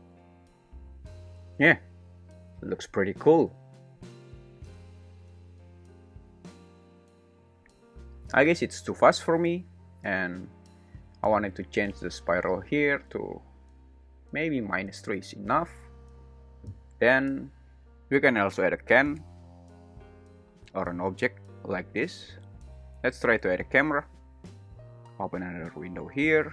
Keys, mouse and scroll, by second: 3.8 `, 7.5 `, 13.8-17.9 drag, 19.6 click, 22.5 `, 23.0 shift+a, 24.7 g, 24.7 z, 25.2-26.3 drag.